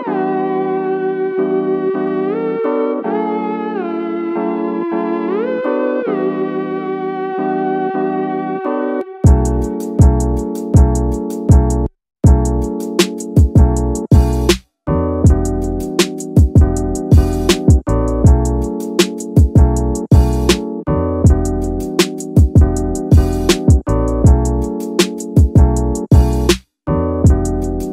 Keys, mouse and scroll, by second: 0.0 Tab, 0.3 middle drag, 0.7 scroll down 2, 1.0 middle drag, 1.3 click, 1.6 scroll up 1, 1.7-2.0 middle drag, 2.5-3.1 scroll down 1, 3.1 KP_1, 3.8-4.3 scroll up 2, 4.3 click, 4.8 Tab, 5.2 middle click, 5.8 shift+scroll up 1, 5.8 shift+middle click, 7.0 ctrl+r, 7.8 ctrl+r, 7.9 ctrl+r, 10.0 click, 11.1 ctrl+r, 13.3 click, 13.7 middle click, 15.1 ctrl+r, 16.0 ctrl+r, 16.0 ctrl+r, 18.4 click, 19.5 ctrl+r, 21.5 click, 21.8 scroll up 1, 21.8 middle click, 23.0 middle click, 23.6 middle click, 23.9 scroll up 1, 24.2 middle click, 25.3 ctrl+r, 26.1 ctrl+r, 26.2 ctrl+r.